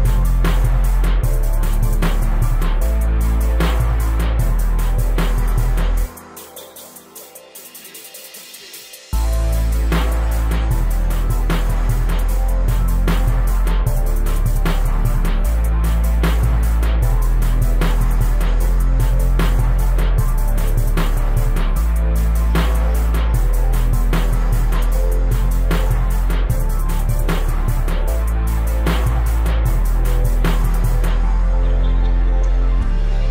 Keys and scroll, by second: 0.2 m, 4.3 Right, 7.1 space, 8.7 o, 14.0 \.